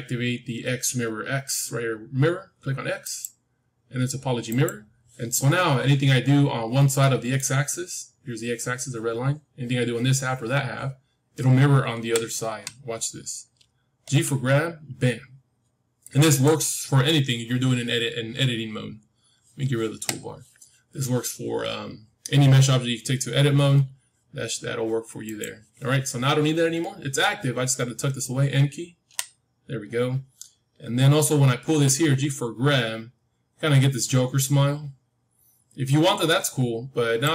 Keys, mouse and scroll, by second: 2.9-6.4 drag, 6.0 middle click, 6.4-6.9 scroll down 1, 6.9-8.9 middle drag, 8.9-9.3 scroll up 1, 11.9 KP_1, 12.8-14.8 middle drag, 14.0 g, 19.9 t, 23.6 g, 28.9 n, 30.7-32.8 middle drag, 31.5 g.